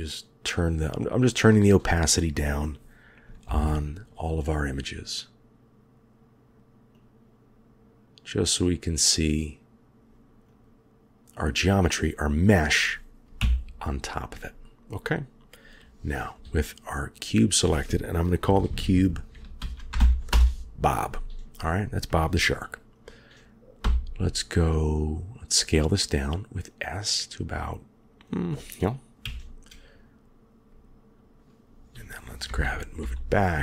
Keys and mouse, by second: 3.3 ctrl+KP_7, 6.8 click, 8.3-9.8 drag, 13.3 KP_1, 17.1-20.2 drag, 23.7 s, 29.1 KP_3, 32.4 g.